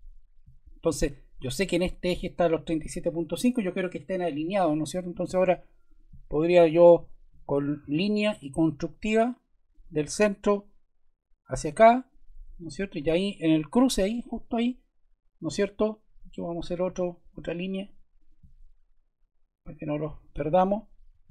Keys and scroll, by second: 12.9 Escape, 16.8 l, 21.1 Escape.